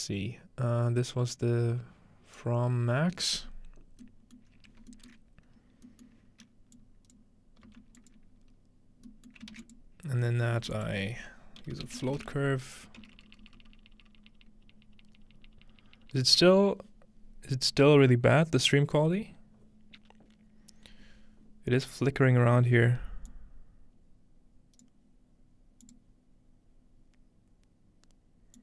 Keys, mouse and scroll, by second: 4.4 middle click, 4.5-5.9 scroll up 2, 5.1-5.9 middle drag, 5.9 scroll up 1, 6.1-8.3 middle drag, 8.3-12.3 drag, 8.3 f, 9.4 middle click, 12.5 typing, 14.4 BackSpace.